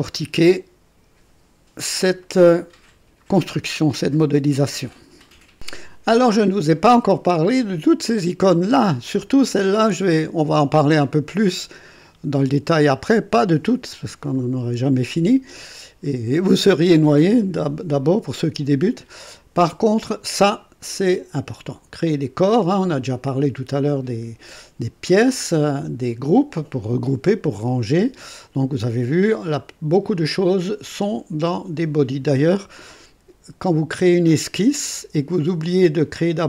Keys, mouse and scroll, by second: 2.2-3.4 right drag, 5.3 right click, 5.5 click, 29.7-30.3 scroll down 1, 30.3-36.4 scroll down 1.